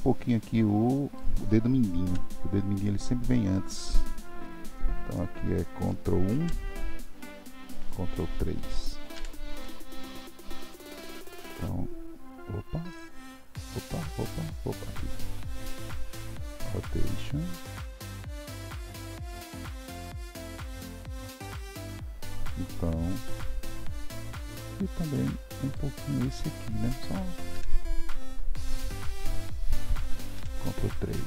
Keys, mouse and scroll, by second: 2.0 KP_3, 6.3 ctrl+KP_1, 9.1 ctrl+KP_3, 10.7 click, 12.9-14.2 drag, 16.1 r, 19.6 click, 19.8 r, 20.4 click, 20.4 r, 21.0 click, 21.4 click, 24.5-25.0 drag, 25.0-26.2 middle drag, 26.2 click, 27.5 KP_3.